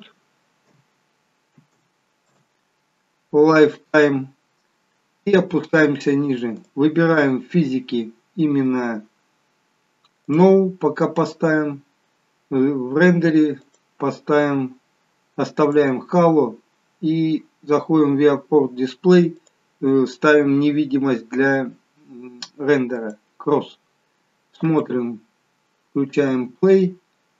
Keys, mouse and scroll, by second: 2.0 0, 4.7 scroll down 1, 6.7 click, 6.7-7.9 scroll down 3, 11.4 scroll down 1, 13.7 click, 13.7-14.6 scroll down 2, 16.3-16.9 scroll down 3, 19.5 click, 19.5-19.9 scroll down 3, 24.8 space.